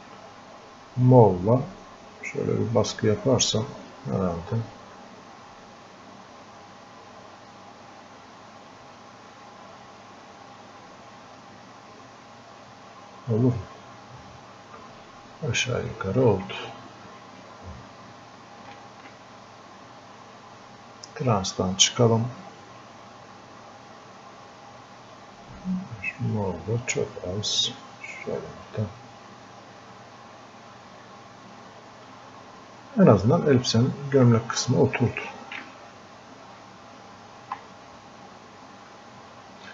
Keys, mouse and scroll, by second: 7.6-10.6 drag, 10.6-15.3 drag, 15.3-17.9 drag, 19.6 click, 23.8-27.4 drag, 27.4 click, 28.1 click, 28.7 click, 30.0 click, 30.7-34.0 drag, 34.0 click, 34.8-39.5 alt+drag, 38.0 ctrl+click.